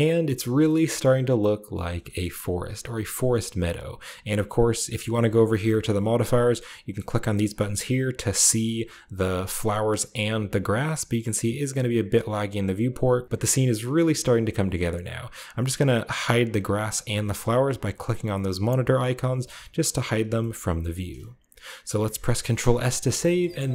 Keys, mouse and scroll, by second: 0.7-3.7 shift+middle drag, 2.2-3.7 shift+scroll down 1, 4.2 click, 4.8 click, 6.8 click, 7.5 click, 11.2-11.7 scroll down 2, 11.7 scroll, 12.0 scroll up 2, 12.8-13.2 scroll up 1, 16.3 click, 17.0 drag, 18.3 click, 18.7 click, 19.3 click, 19.7 click, 20.3-22.4 shift+middle drag, 22.4 ctrl+s, 23.2 shift+middle click.